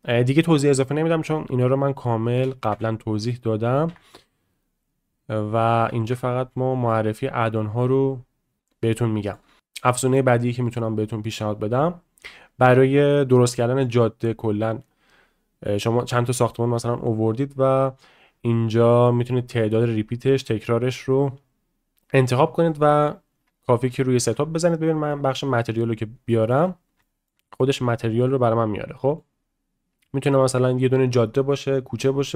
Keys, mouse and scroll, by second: 4.9 click, 5.8 a, 6.1 x, 8.8-9.3 shift+middle drag, 9.6-19.3 drag, 19.6 click, 19.9 click, 20.3 click, 20.8 click, 23.9-24.2 shift+middle drag, 26.3 middle click, 27.0 shift+middle drag, 27.4 middle drag, 28.0 shift+middle drag, 28.4-29.2 middle drag, 30.0-30.3 middle drag, 32.2-32.3 shift+middle drag.